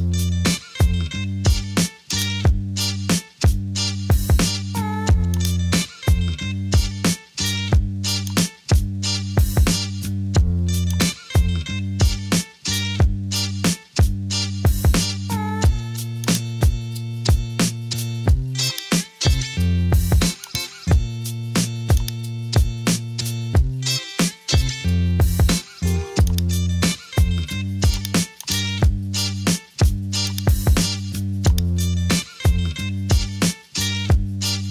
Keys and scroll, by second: 0.6 BackSpace, 3.9 super+t, 12.1 Return.